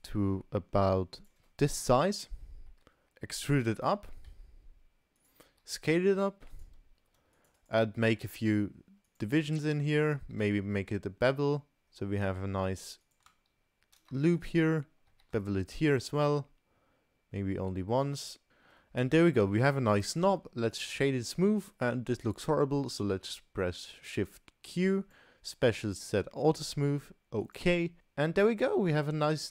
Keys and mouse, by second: 2.0 KP_Decimal, 3.0 Tab, 3.1 3, 3.3 e, 5.5 s, 7.0 ctrl+r, 8.2 s, 10.2 ctrl+b, 13.0 click, 14.4 alt+click, 15.1 ctrl+b, 18.5 middle click, 19.0 Tab, 19.4-19.8 middle drag, 20.2 right click, 21.7-22.1 middle drag, 23.1 shift+q, 28.0-29.0 middle drag.